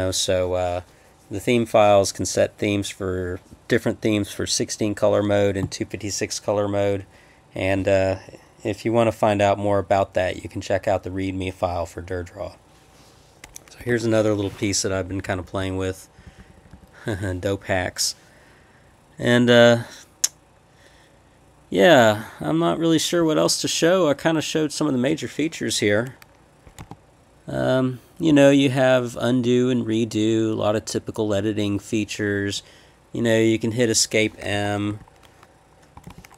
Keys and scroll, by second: 13.8 Escape, 13.9 p, 14.9 Up, 15.1 Up, 15.3 Up, 15.5 Up, 15.6 Up, 16.1 Up, 16.2 Up, 16.4 Left, 16.6 Left, 16.7 Left, 26.7 Escape, 26.8 h, 34.5 Escape, 34.9 m, 35.9 Escape, 36.0 z.